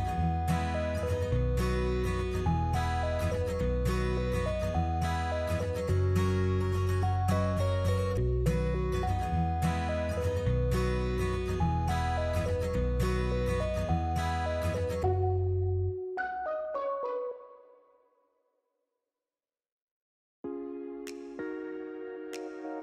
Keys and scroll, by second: 5.4 ctrl++, 8.5 ctrl+-, 13.1 ctrl+-, 19.0 space, 22.0 Delete.